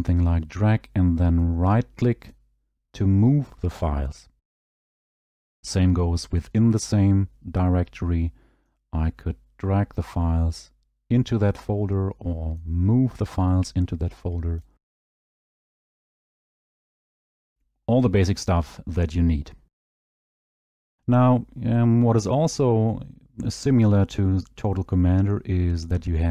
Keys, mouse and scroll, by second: 2.3 click, 2.3 right click, 5.5 click, 6.8 scroll, 14.5 click, 14.6 right click, 16.3 click, 17.6 scroll.